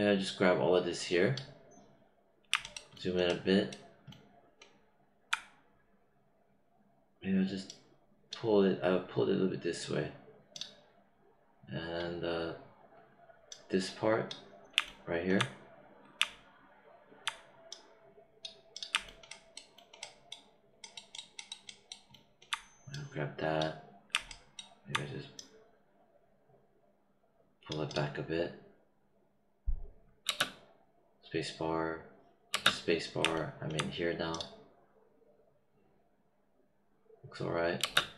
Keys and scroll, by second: 30.2 space, 32.4 space, 37.7 space.